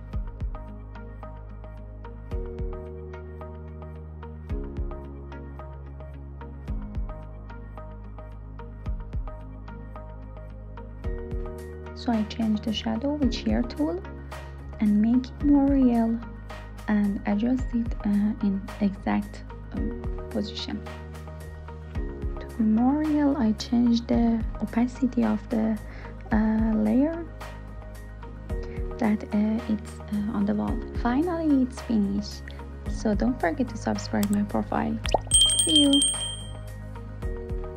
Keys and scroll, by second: 5.6 Return.